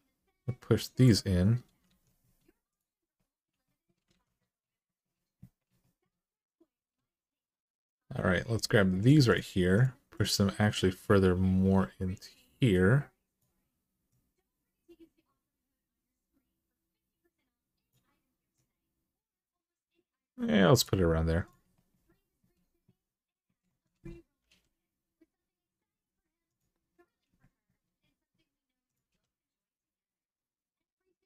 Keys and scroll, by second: 1.6 alt+z, 3.9 alt+z, 24.2 g, 28.9 g.